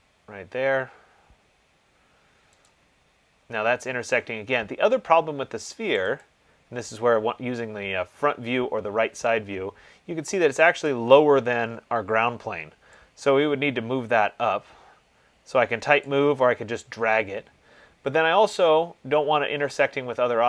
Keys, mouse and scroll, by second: 0.1 click, 3.1 click, 6.2 click, 6.4 click, 7.7 middle click, 7.8 scroll, 8.0 middle click, 8.1 middle click, 8.8 middle click, 9.0 middle click, 11.0 scroll, 11.1 click, 16.2 click, 19.0-20.4 scroll.